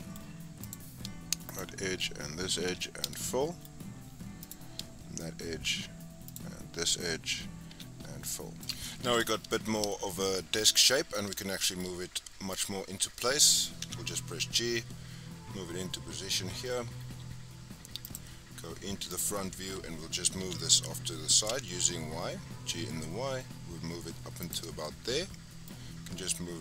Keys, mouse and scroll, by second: 0.6 click, 1.4 shift+click, 2.6 f, 3.1-4.4 shift+middle drag, 4.4 click, 6.2 shift+click, 7.6 f, 8.0 scroll down 3, 8.2 middle click, 8.7 click, 9.5-9.8 scroll down 1, 9.8-12.4 middle drag, 12.4 click, 13.7 g, 19.0 click, 20.3 g, 24.6 scroll down 4, 24.8-26.6 middle drag.